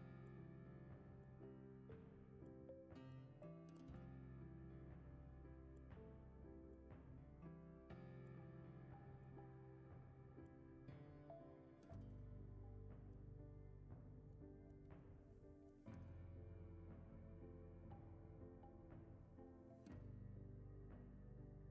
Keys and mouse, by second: 1.1 Tab, 1.5 shift+middle click, 2.7 click, 3.8 click, 4.5 alt+shift+click, 4.8 alt+shift+click, 6.4 alt+shift+click, 7.3 shift+middle click, 8.2 middle click, 9.0 shift+middle click, 10.7 alt+shift+click, 11.2 middle click, 12.1 shift+middle click, 13.5 alt+shift+click, 13.9 middle click, 14.8 shift+middle click, 16.1 alt+shift+click, 17.6 alt+shift+click, 17.9-18.6 middle drag, 18.9-20.8 shift+middle drag, 20.8 alt+shift+click.